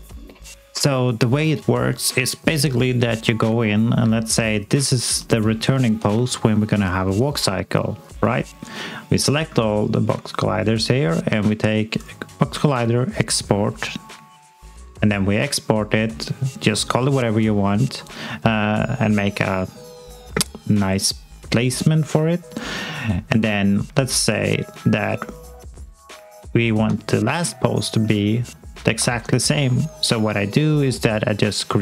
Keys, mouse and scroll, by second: 4.1 scroll up 1, 4.4 alt+space, 4.6 alt+click, 8.0 click, 24.3-25.3 scroll down 1, 25.3 click, 26.4 alt+middle click, 27.1 scroll down 2, 27.5 alt+click, 28.0 alt+middle click, 28.4 alt+click, 29.8-30.8 alt+scroll down 1, 30.8 scroll down 1.